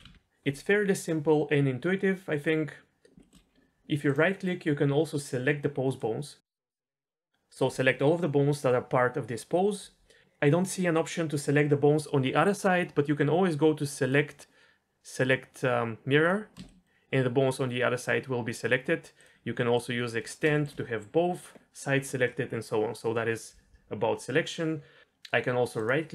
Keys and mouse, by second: 0.1 alt+s, 3.2 shift+middle drag, 4.2-6.0 drag, 6.7 middle click, 14.0-14.9 drag, 14.9-16.3 middle drag, 16.6 shift+middle click, 19.2 click, 19.7-20.2 drag, 20.5 shift+middle drag, 25.8-26.1 drag.